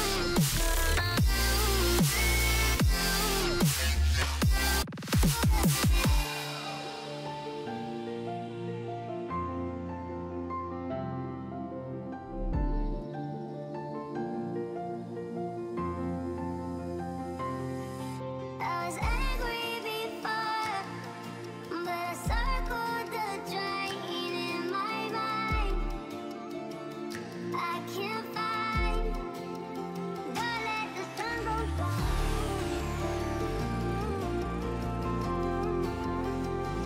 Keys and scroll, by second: 33.0 Up, 33.5 Up, 34.1 Down, 35.1 Return.